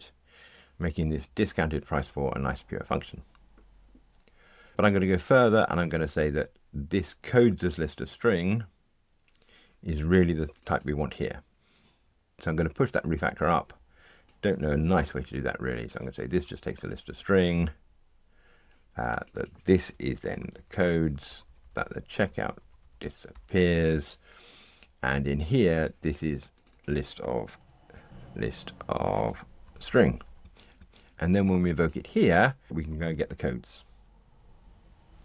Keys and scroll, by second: 14.7 super+c, 22.5 alt+shift+Right, 23.3 Delete, 34.0 ctrl+r.